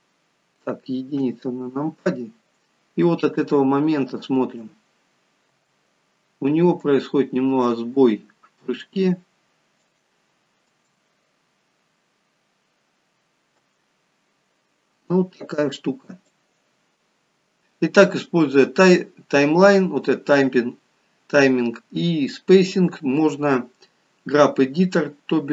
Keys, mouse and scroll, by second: 1.3 KP_1, 4.4 space, 5.6 space, 6.8 click, 10.8 space, 13.6 space, 16.4 click.